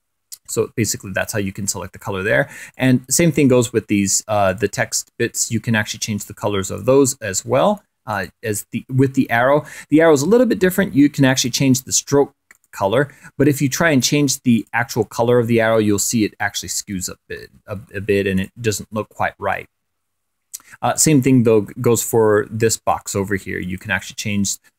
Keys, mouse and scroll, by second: 0.4 ctrl+scroll up 2, 1.2 click, 2.3 click, 4.0 click, 6.1 click, 7.7 click, 10.8 right click, 12.1 click, 14.1 click, 17.3 ctrl+z, 18.2 click, 19.1 click, 20.4 click, 22.4 click, 23.2 right click, 24.5 click.